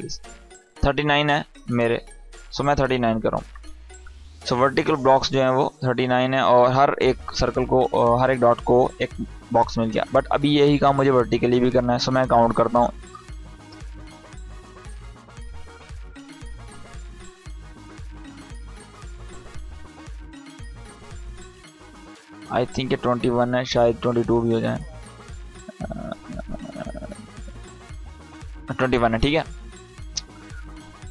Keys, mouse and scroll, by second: 1.1 click, 22.2 click.